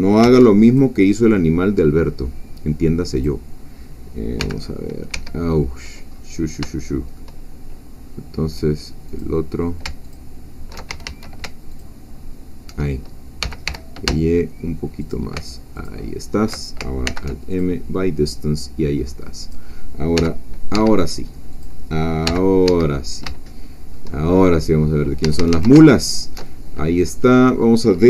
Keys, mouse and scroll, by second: 0.2 alt+m, 0.7 alt+click, 3.1 click, 4.4 g, 5.1 Escape, 6.1 scroll up 2, 6.5 scroll down 3, 6.8 shift+middle click, 7.4 shift+scroll up 2, 9.2 click, 10.0 alt+shift+click, 10.9 alt+shift+a, 11.7 alt+shift+click, 13.4 g, 13.7 y, 15.0 shift+click, 15.7 alt+shift+click, 17.1 alt+m, 17.5 alt+click, 18.3 scroll down 1, 19.4 click, 20.2 g, 20.7 Escape, 21.5 click, 22.3 g, 22.7 Escape, 23.0 middle click, 23.5-24.5 shift+drag, 25.3 a, 25.9 alt+shift+click, 27.1 middle click.